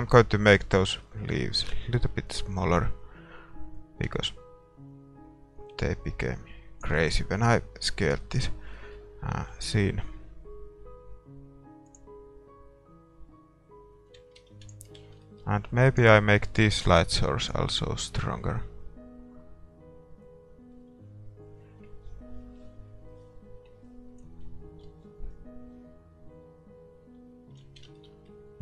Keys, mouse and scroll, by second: 1.1 ctrl+s, 3.9-5.6 drag, 7.3-11.1 middle drag, 9.6 shift+z, 12.1-14.2 drag, 14.3 shift+z, 15.0 ctrl+s, 15.0 middle click, 15.9-24.8 right drag, 25.0 middle click, 25.0 right click, 27.8 shift+z, 28.0-28.6 middle drag.